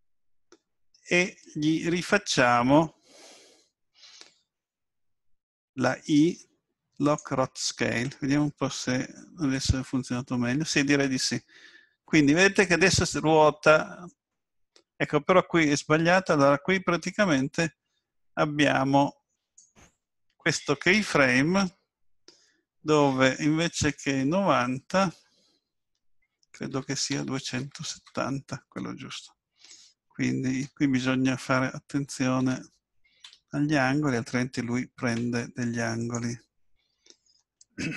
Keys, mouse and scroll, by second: 6.3 i, 9.5 click, 23.6 click, 35.8 i.